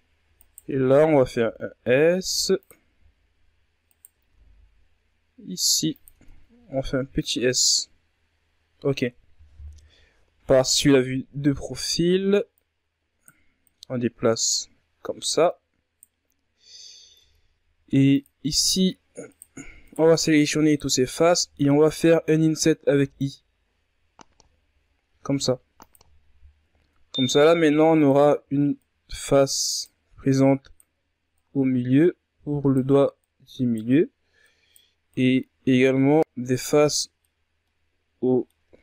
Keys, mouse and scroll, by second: 0.3 scroll up 2, 0.8 s, 3.4 alt+right click, 3.8 s, 5.6 Tab, 5.8-6.6 scroll down 3, 6.6 ctrl+scroll up 3, 6.9-7.8 scroll down 3, 7.8-8.5 scroll up 7, 8.5 Tab, 9.3 KP_3, 10.6-12.0 shift+scroll up 3, 12.0 right click, 13.1 right click, 14.8 right click, 17.7 ctrl+Tab, 18.8 right click, 19.3 shift+right click, 19.8 shift+right click, 20.2 shift+right click, 22.4 i, 25.7-26.6 scroll up 1, 27.6 ctrl+Tab, 28.3 right click, 29.8 right click, 30.8 right click, 32.7 right click, 33.9 right click, 34.6 right click, 36.3 scroll down 1, 36.4 middle click, 36.9-37.2 scroll down 1, 37.2 scroll up 1, 37.2-38.6 middle drag, 38.6 right click.